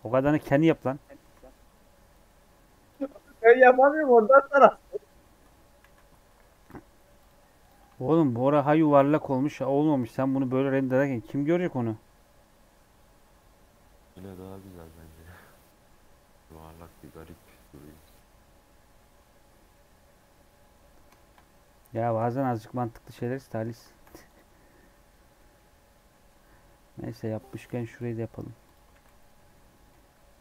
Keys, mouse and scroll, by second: 0.0 right click, 1.2 KP_Decimal, 2.8-5.2 drag, 5.2 middle click, 5.4 Tab, 5.8 a, 6.6 p, 7.3 Tab, 7.5 click, 7.8 shift+scroll down 1, 7.9 shift+middle click, 8.4-9.0 scroll up 4, 8.7 shift+middle click, 9.2 middle click, 9.6-10.1 scroll down 7, 10.1 middle click, 10.4-11.1 scroll up 4, 10.7 shift+middle click, 17.3 middle click, 17.8-20.1 drag, 20.1-20.9 scroll up 8, 21.1-22.4 middle drag, 22.4 click, 22.8 scroll down 3, 23.0 click, 23.3 h, 23.8 shift+middle click, 24.2-26.0 drag, 26.0 middle click, 26.3 Tab, 26.4 scroll up 3, 27.1-27.4 scroll down 1, 27.4 middle click, 27.9 click, 28.2 Tab, 28.4 3, 28.6 click, 28.8 shift+d, 29.8 p.